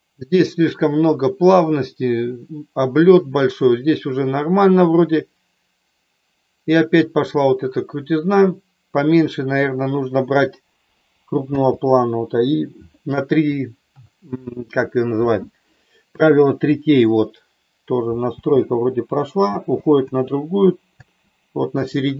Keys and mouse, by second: 11.6 space, 18.3 space, 19.5 space, 20.0 space, 21.1 space.